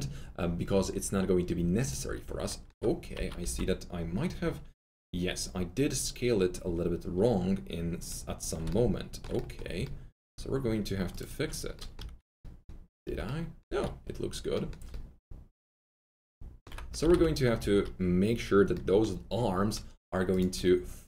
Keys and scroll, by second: 3.2 r, 11.9 F3, 13.0 F3, 13.6 F3, 14.8 typing, 17.0-17.6 typing.